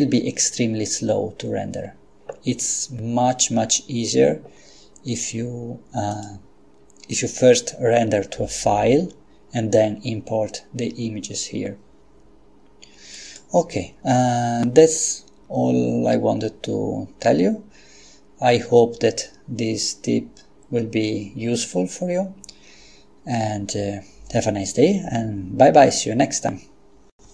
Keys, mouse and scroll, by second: 6.1 click, 13.2 click.